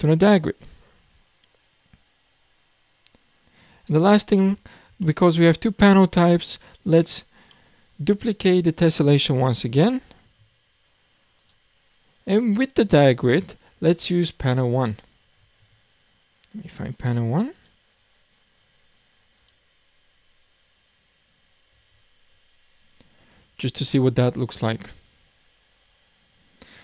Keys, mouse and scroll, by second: 4.4-5.0 scroll down 5, 5.0-6.1 shift+middle drag, 6.1-6.7 scroll up 2, 7.5-9.6 middle drag, 9.6 shift+d, 11.4-11.7 drag, 11.9-13.1 scroll down 5, 13.1 click, 13.9 click, 15.9-17.5 scroll up 5, 17.5 click, 25.7-26.8 scroll down 8.